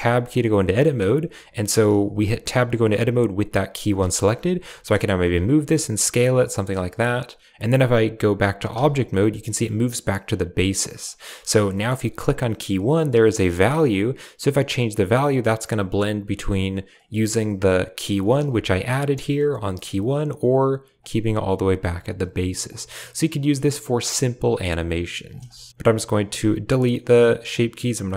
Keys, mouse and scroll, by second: 0.0 typing, 2.0 Tab, 2.3 Tab, 4.0 shift+click, 4.5 g, 5.1 s, 5.6 r, 6.0 g, 8.7 Tab, 9.2 click, 10.8 click, 11.7 shift+click, 13.2-16.9 drag, 18.4 Tab, 19.0 Tab, 20.9 click, 22.7-25.2 drag, 25.5 shift+click, 26.6 click, 26.6 typing, 28.0 click.